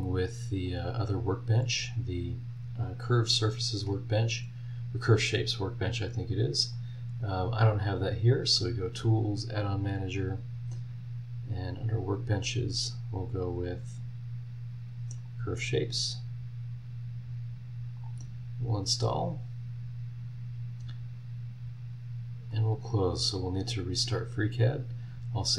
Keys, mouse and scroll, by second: 0.6 click, 6.7 click, 8.3 click, 9.8 click, 13.4 scroll down 1, 14.4 scroll down 2, 15.2 click, 18.0 click, 22.5 click, 24.1 click, 25.3 click.